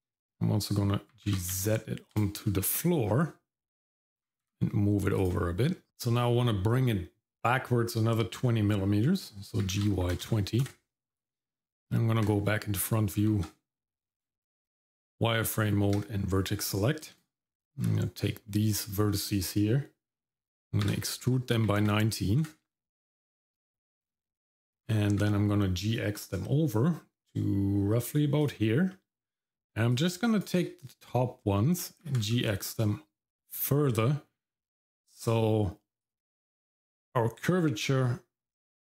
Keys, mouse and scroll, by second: 1.1 g, 2.6 middle click, 4.1 g, 5.7 middle click, 9.6 g, 13.2 shift+z, 13.9 Tab, 16.5-16.9 scroll up 1, 17.0 click, 17.4 middle click, 17.8-19.6 scroll up 1, 20.9 e, 23.5 click, 24.7 g, 28.9 middle click, 29.9 click, 32.0 g.